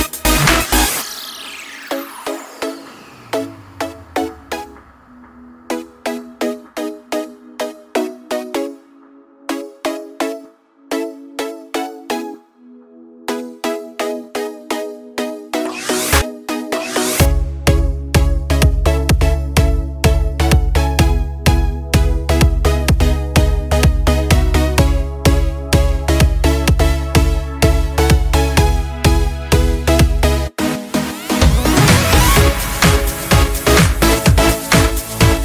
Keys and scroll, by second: 1.7 ctrl+t, 7.3 Right, 7.5-8.4 Right, 15.4 a, 16.5-22.7 typing, 16.6 Caps_Lock, 28.2 ctrl+t.